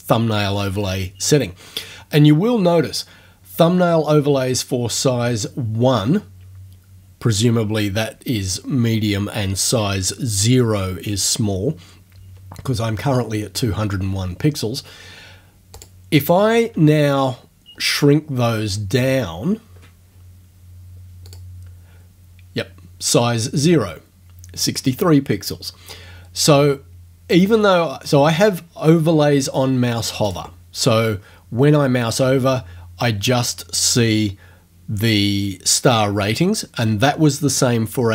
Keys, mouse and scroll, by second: 15.8 click, 16.9-17.6 ctrl+scroll down 2, 17.7-18.2 ctrl+scroll down 2, 18.4-19.5 ctrl+scroll down 8, 21.3 click, 30.3 click.